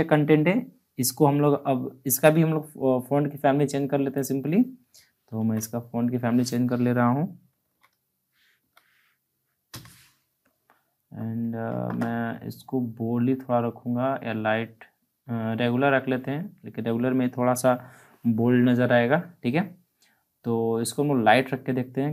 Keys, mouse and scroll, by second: 4.1 click, 5.3 ctrl+a, 7.5-9.6 typing.